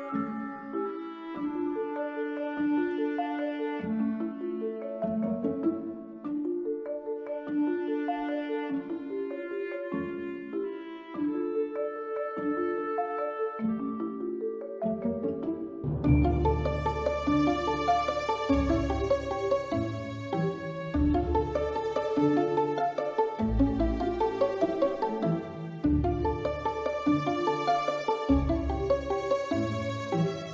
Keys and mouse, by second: 0.6 click, 2.5 s, 3.6 click, 4.3 click, 5.8 b, 6.8 s, 7.7 click, 8.2 click, 8.3 b, 9.4 s, 10.6 click, 11.3 Tab, 11.4 click, 12.5 click, 19.7 middle click, 20.4 middle click, 21.2-23.3 drag, 24.2 click, 26.4 click.